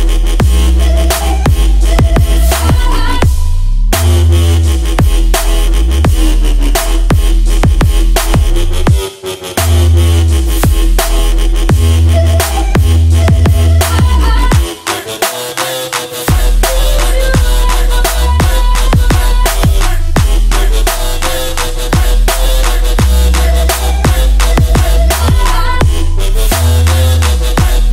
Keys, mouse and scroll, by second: 0.1 F10, 1.5 click, 2.1-4.7 typing, 5.9 click, 7.3 right click, 8.4-9.7 drag, 8.6-11.1 typing, 11.5 Return, 12.4-13.7 drag, 14.7-16.5 drag, 16.7-17.7 right drag, 18.2-20.7 drag, 18.9-21.5 typing, 22.4 Down, 22.7 Return, 24.5-27.0 drag, 27.0 right click.